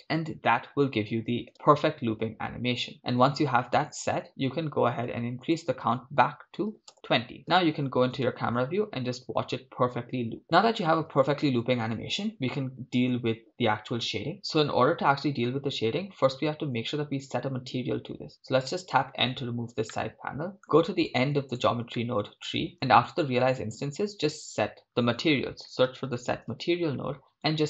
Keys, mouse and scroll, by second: 1.5 shift+space, 5.1 shift+space, 5.6-6.9 drag, 7.4 KP_0, 8.2 shift+space, 20.2-23.0 middle drag, 23.0 click.